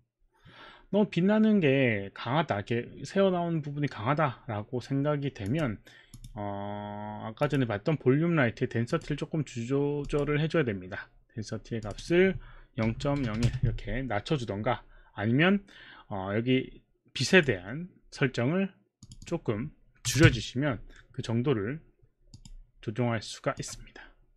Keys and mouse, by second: 5.4 click, 6.2 click, 7.4 click, 8.9 click, 10.0 click, 11.9 click, 12.8 KP_0, 13.2 KP_0, 13.2 KP_Decimal, 17.3 click, 19.1 click, 20.0 KP_5, 20.3 Return, 22.4 click, 23.6 click.